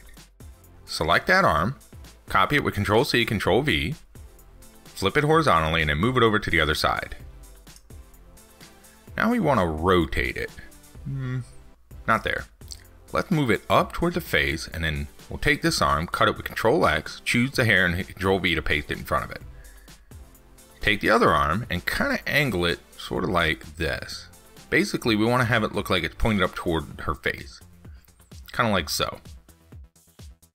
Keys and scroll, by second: 2.2 ctrl+c, 2.4 ctrl+v, 11.1 ctrl+z, 15.3 ctrl+x, 15.9 ctrl+v.